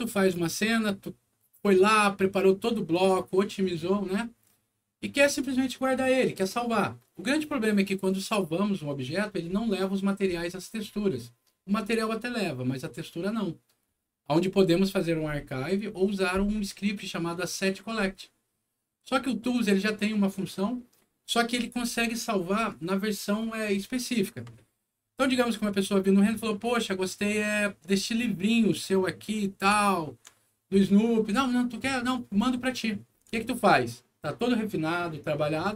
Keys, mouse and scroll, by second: 1.5 alt+click, 2.8 alt+click, 4.5 scroll up 2, 7.1 middle click, 24.5 middle click, 25.0 scroll down 1, 26.1 middle click, 27.8 scroll up 1, 28.4 click, 29.4 scroll up 1, 29.8 alt+middle click, 32.4 alt+middle click, 33.3 alt+middle click, 35.6 alt+click.